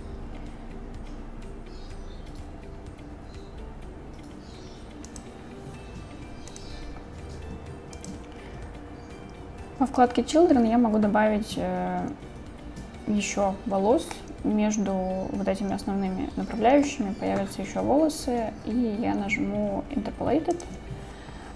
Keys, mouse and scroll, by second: 5.1 click, 6.5 click, 8.0 click, 14.2-16.9 middle drag, 20.6 click.